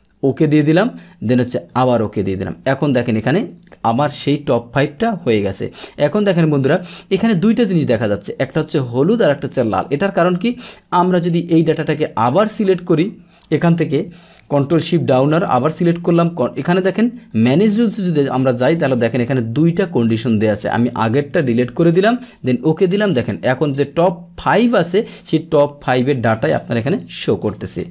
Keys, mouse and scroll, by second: 0.3 click, 1.7 click, 2.7-4.6 scroll down 1, 4.6 scroll down 1, 4.7-6.3 middle drag, 6.3 click, 8.9 click, 9.5-10.6 scroll down 1, 10.6-13.1 drag, 13.1-14.1 scroll down 1, 14.1 click, 14.9 ctrl+shift+Down, 16.1 click, 17.3 click, 20.5 click, 23.2 click, 23.7 middle click, 24.4-25.0 scroll down 2, 25.0-26.1 scroll up 2, 26.1 scroll up 1, 26.2 click.